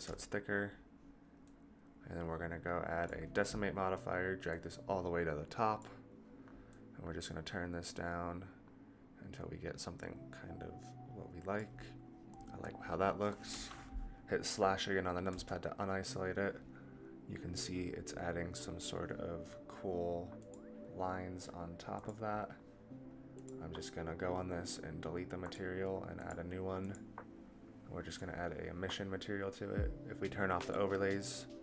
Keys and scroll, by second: 15.2 KP_Divide.